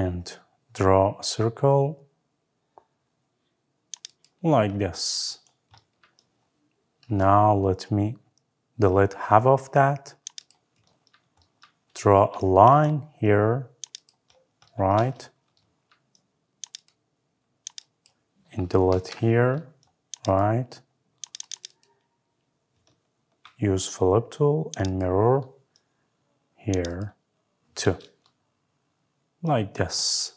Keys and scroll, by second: 18.7 Delete.